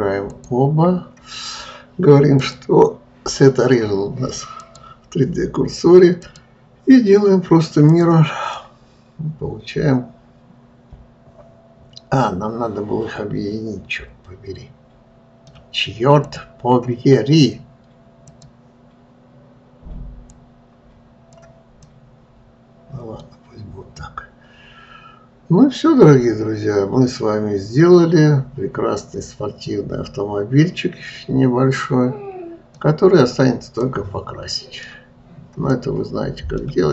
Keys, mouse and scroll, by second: 0.8 shift+click, 2.8-5.9 drag, 6.6-9.0 drag, 9.0-12.0 middle drag, 16.7 click, 18.7-21.7 drag, 22.3-23.8 middle drag, 23.8-24.5 scroll down 2, 24.5-27.7 middle drag, 33.6 scroll up 2, 34.3-36.9 middle drag.